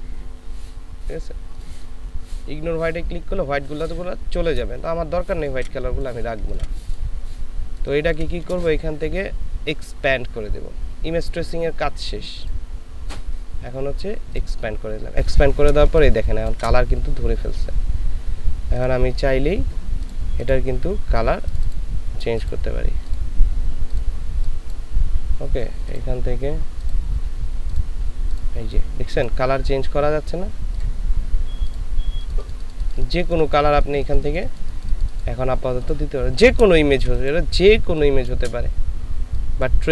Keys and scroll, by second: 4.9 ctrl+space, 6.4 ctrl+alt+space, 15.9 ctrl+space, 37.0 ctrl+space.